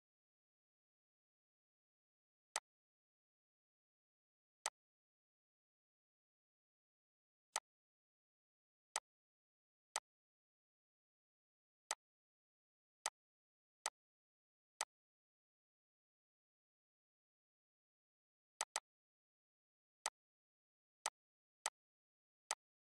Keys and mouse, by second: 2.2 click, 7.2 click, 18.3 click.